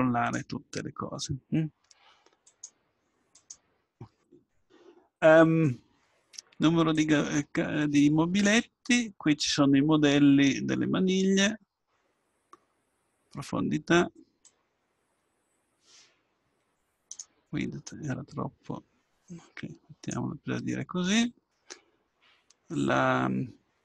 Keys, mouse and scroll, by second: 2.5-5.4 drag, 7.1-10.6 drag, 14.5-16.3 drag, 18.4-19.7 drag, 21.9 middle click.